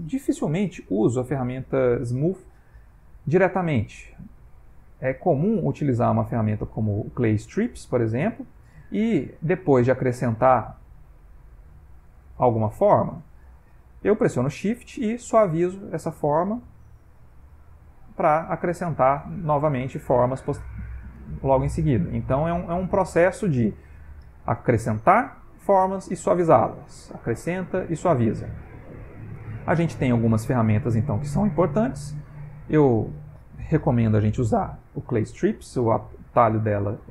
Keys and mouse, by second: 5.6 click, 6.3 click, 8.5 click, 9.8 click, 10.5 f, 11.8 click, 14.6 shift+click, 15.0 shift+click, 15.3 shift+click, 16.0 shift+click, 17.1 shift+click, 17.2 shift+click, 19.6 click, 19.9 click, 20.1 click, 20.5 click, 20.7 click, 21.2 click, 21.8-22.5 shift+click, 22.2 shift+click, 22.6 click, 23.3 click, 23.6 click, 24.0 click, 24.5 click, 24.9 click, 25.3-25.7 shift+click, 26.5 click, 27.5 shift+click, 27.9 shift+click, 28.9 ctrl+middle click, 29.9 middle click.